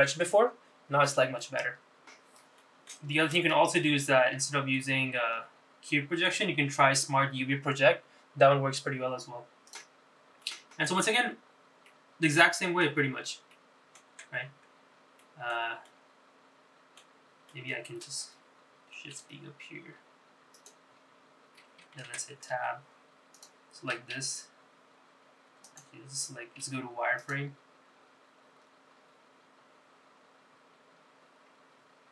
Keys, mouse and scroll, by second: 3.7 middle click, 5.2 ctrl+z, 6.5 u, 10.8 click, 11.6 middle click, 12.2-12.7 scroll up 3, 13.0-14.0 middle drag, 14.6 middle click, 15.4 Tab, 15.6-16.4 scroll down 3, 16.4 middle click, 17.0-18.1 middle drag, 18.6 alt+middle click, 19.4-19.9 scroll up 1, 20.2 shift+d, 23.2 Tab, 24.5 click, 25.3 l, 26.8 click, 27.8 z.